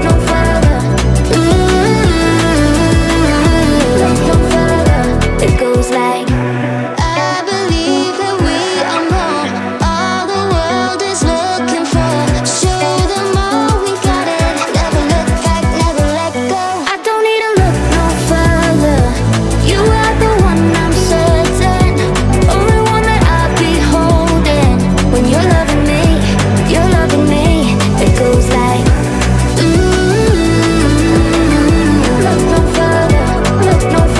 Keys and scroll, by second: 20.6 Up, 28.1 Right.